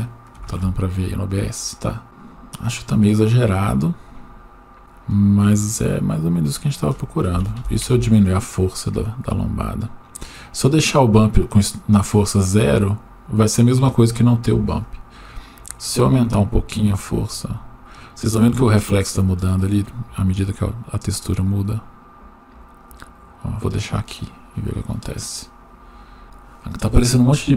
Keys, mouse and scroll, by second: 4.8-5.7 drag, 6.6-7.9 drag, 10.3-10.8 drag, 14.8-22.7 drag.